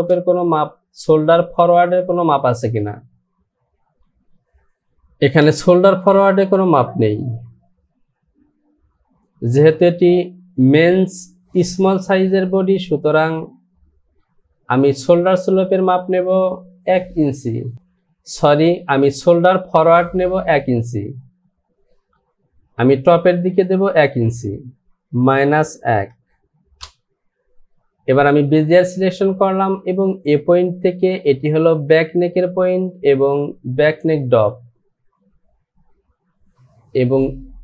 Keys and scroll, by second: 21.8 Return, 25.4 KP_Subtract, 26.0 KP_Subtract, 26.8 Return.